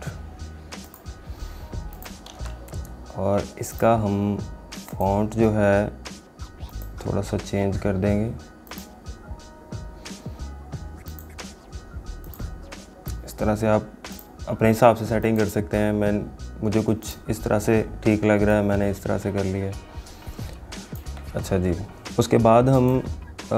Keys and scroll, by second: 2.4 ctrl+a.